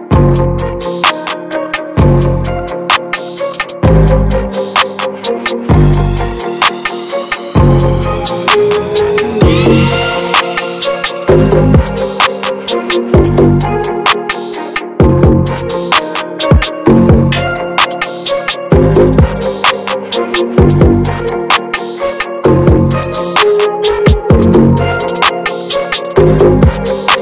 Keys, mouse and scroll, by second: 0.8 ctrl+z, 1.1 click, 1.3 middle click, 1.5-1.9 scroll up 1, 1.9 middle click, 2.7 ctrl+z, 3.7 ctrl+z, 3.9 middle click, 4.9-6.1 scroll down 2, 6.1-6.4 scroll down 1, 6.4-8.5 scroll up 2, 8.5-12.5 drag, 12.5 ctrl+z, 12.7 middle click, 13.2 shift+f, 14.6-17.7 drag, 19.1 scroll down 3, 19.3 middle click, 20.0 scroll up 2, 20.3-21.7 middle drag, 21.7 ctrl+z, 22.3-26.2 drag, 26.2 middle click, 26.5 ctrl+z.